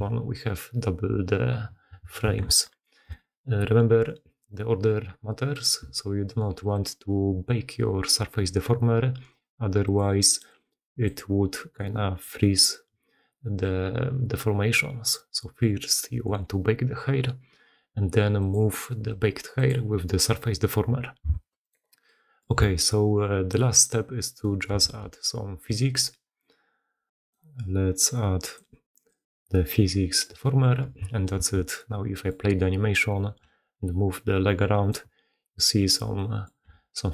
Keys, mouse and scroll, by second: 2.4 shift+space, 21.3 shift+space, 22.6 g, 24.8 shift+space, 27.1 click, 28.5-30.2 drag, 31.3 shift+space, 31.8 click, 32.4 middle click, 33.4 g, 36.2 middle click, 36.6 g.